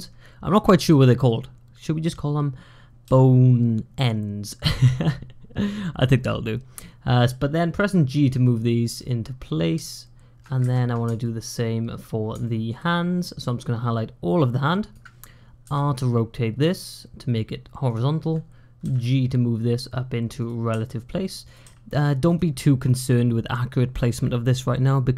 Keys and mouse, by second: 2.9 g, 9.8 click, 11.1 shift+middle click, 12.3 shift+middle click, 13.3-14.8 drag, 15.5 r, 18.7 g, 20.5 r, 21.5 g.